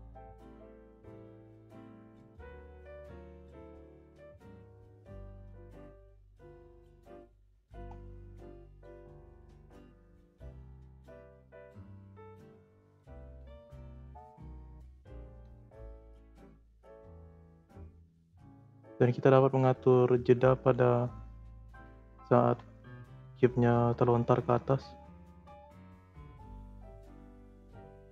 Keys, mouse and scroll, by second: 1.5-2.1 scroll down 2, 2.1 middle click, 2.7 scroll down 1, 3.0-4.6 middle drag, 4.6-4.9 scroll up 4, 4.9 click, 5.3 middle click, 5.4-5.9 scroll up 2, 5.9 click, 6.9 click, 7.4-7.8 scroll up 8, 7.8-8.8 middle drag, 8.8 click, 9.9 click, 12.8 space, 13.3 space, 13.9-14.5 drag, 14.5 space, 15.4 space, 15.8-18.8 drag, 21.6-22.1 scroll up 1, 22.1 shift+s, 23.5-25.2 drag, 25.2 space, 25.7 space, 26.1-28.1 drag.